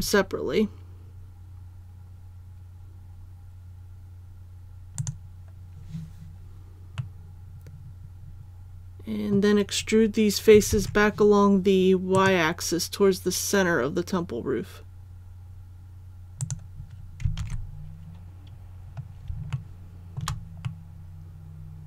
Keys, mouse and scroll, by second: 5.0-6.0 drag, 7.0-10.0 middle drag, 10.7 alt+e, 12.1 click, 17.4 alt+a, 18.5-18.8 scroll down 1, 19.5 shift+middle click, 20.6-21.8 middle drag.